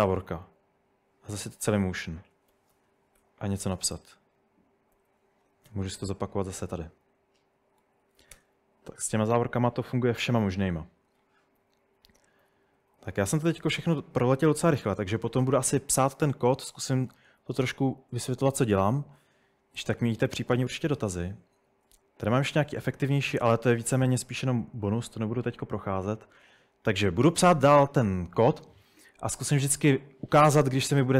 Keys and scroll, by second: 2.1-6.2 typing, 7.7-8.7 typing, 11.6-13.2 typing, 16.2 typing, 28.8 typing.